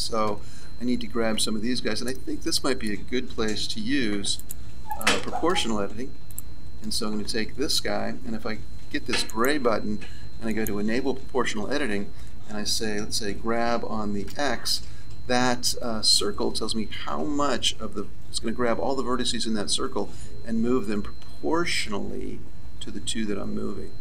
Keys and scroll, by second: 3.3 z, 13.2 g.